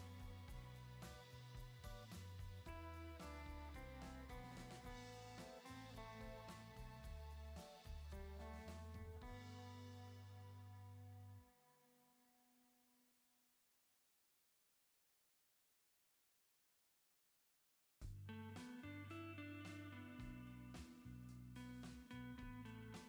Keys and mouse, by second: 2.5-3.9 drag, 4.4 click, 5.0 click, 5.3 middle click, 11.9 click, 12.6 shift+middle click, 14.6 click, 15.5 click, 16.7-22.5 drag.